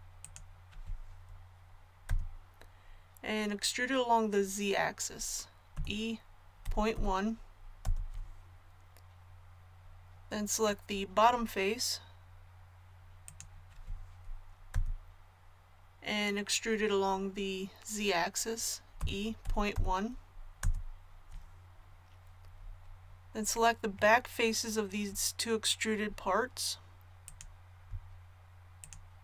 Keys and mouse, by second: 2.0 KP_1, 5.7 e, 11.1-12.9 middle drag, 14.4 middle click, 14.7 KP_1, 19.0 e.